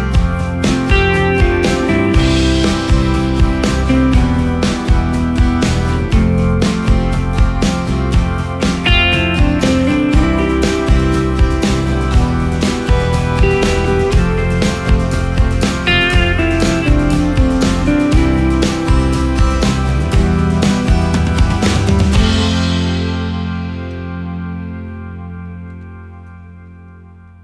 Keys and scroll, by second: 0.9 space, 10.8 Up, 11.6 Down, 15.7 space, 19.3 ctrl+shift+g, 25.5 ctrl+space, 26.2 ctrl+space.